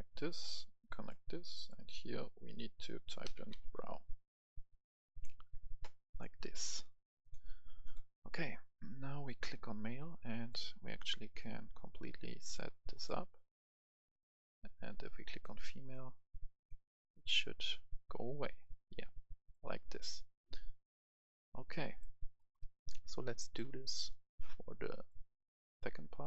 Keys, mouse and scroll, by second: 3.4 click, 3.4-5.1 typing, 5.1 click, 22.4 right click, 23.0 scroll down 1, 23.2 right click, 24.0 click, 25.5 scroll down 1.